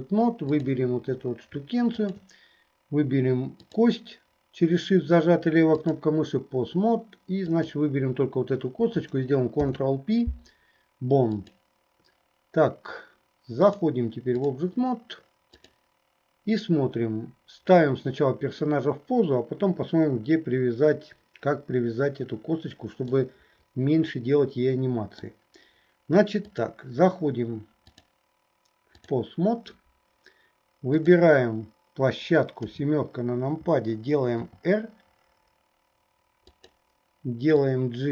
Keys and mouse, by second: 0.7 click, 2.0 shift+click, 3.7-6.2 drag, 7.5 click, 9.6 ctrl+p, 13.8 click, 15.6 right click, 23.2-25.4 middle drag, 26.5 right click, 27.9-29.3 right drag, 32.7 KP_7, 34.4 r, 38.0-38.1 drag, 38.0-38.1 middle drag.